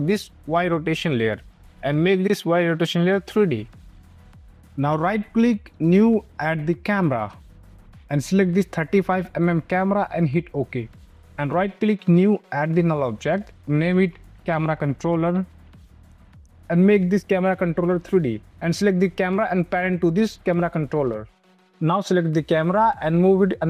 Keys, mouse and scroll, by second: 1.3 click, 4.5 right click, 5.6 click, 11.1 right click, 11.9 click, 14.1 Return, 14.3-16.8 typing, 17.8 click, 18.4 click, 20.8 click, 21.4 click, 21.7 space, 21.8 click, 23.0 click.